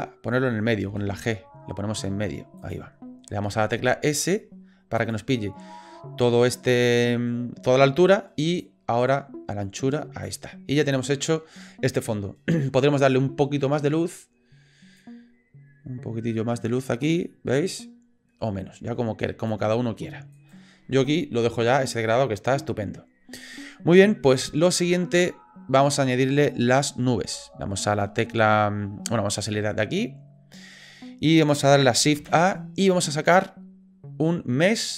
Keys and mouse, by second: 0.8 g, 3.5 s, 8.9 click, 15.1 click, 20.4 click, 29.6 click, 32.2 shift+a.